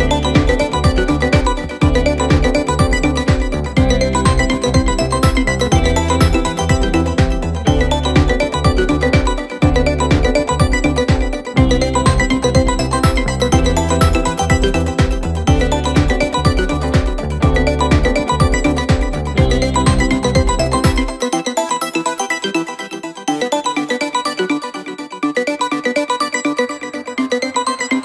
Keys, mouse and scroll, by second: 1.3-4.0 drag, 4.0 KP_Divide, 5.0 KP_7, 5.9 Tab, 7.1 3, 7.9 i, 10.9 x, 11.8-12.7 scroll up 1, 12.7 click, 14.4 x, 15.2-15.6 scroll down 2, 15.6 Tab, 16.2 KP_1, 16.8 r, 19.1-19.4 scroll up 1, 19.4 Tab, 19.9 middle click, 20.4-20.8 scroll up 1, 20.8 a, 21.4 e, 23.6 KP_1, 24.4 2, 25.2 click, 25.4 click, 25.7 middle click, 26.6 shift+click, 26.9 shift+click, 27.3 shift+click, 27.5 shift+click.